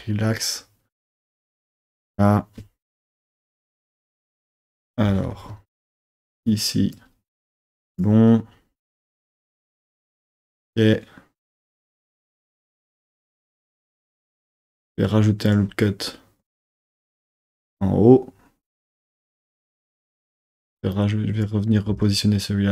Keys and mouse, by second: 3.0 KP_3, 4.7 KP_3, 5.1 z, 6.0 1, 6.5 click, 7.7 click, 15.5 click, 16.8 click, 19.0 click, 19.9 click, 21.0 click, 21.9 g.